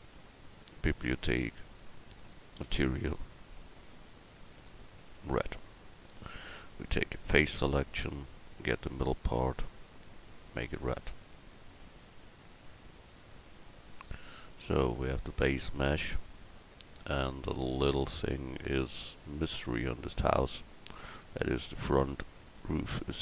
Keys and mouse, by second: 7.3 click, 13.8 Tab.